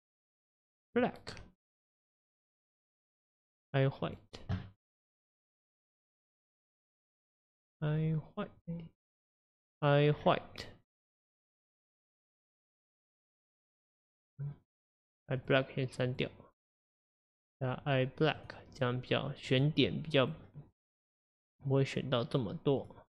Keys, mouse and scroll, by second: 2.2 click, 5.6 click, 8.1-10.3 drag, 13.5-15.5 drag, 16.8-21.7 drag.